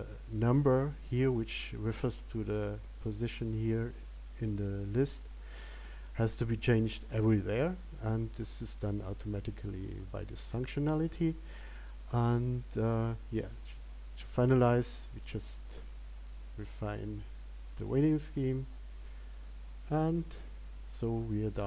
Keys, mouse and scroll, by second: 14.1 click.